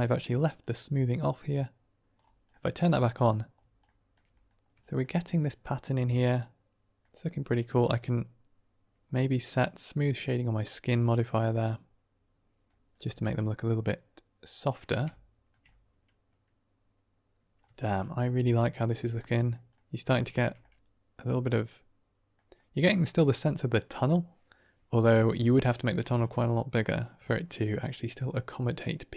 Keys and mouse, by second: 0.0 middle click, 1.1 click, 2.4-3.2 middle drag, 3.7 shift+middle drag, 5.0-6.5 drag, 6.5 middle click, 7.4 right click, 9.9 click, 11.1-12.6 middle drag, 12.9 middle drag, 13.3-14.7 middle drag, 15.1 ctrl+middle drag, 15.7-17.5 middle drag, 17.7 shift+middle drag, 17.9 middle drag, 18.8 click, 19.3 middle click, 19.6 middle drag, 19.9 drag, 20.2 shift+drag, 20.7-22.2 drag, 22.2 middle click, 22.5-23.0 middle drag, 24.0-25.3 middle drag, 26.4-26.8 middle drag, 27.2 shift+middle drag, 27.8-28.6 drag, 28.8-29.1 drag.